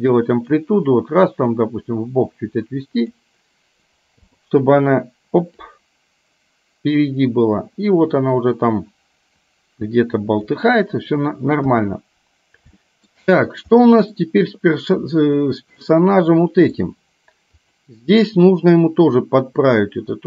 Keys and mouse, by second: 0.4 click, 1.7-3.3 drag, 4.3 i, 5.8-10.6 drag, 11.7 KP_1, 12.9 shift+middle click, 13.8 middle click, 15.8-16.8 middle drag, 17.6 click, 19.3-20.2 drag.